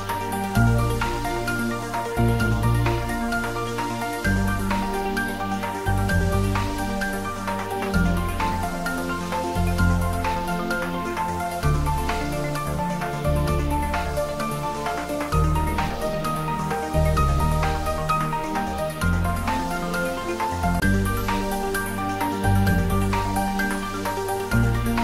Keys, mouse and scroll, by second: 6.2 click, 11.4 click, 19.4-20.2 scroll down 1, 22.7-25.0 drag.